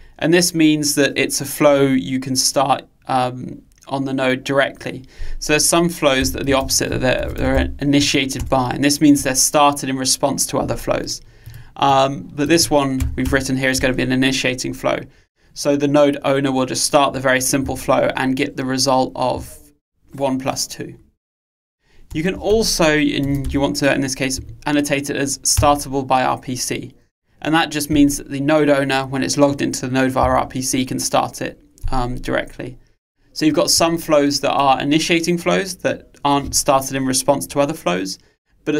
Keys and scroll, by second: 8.5 Return, 25.8 Return.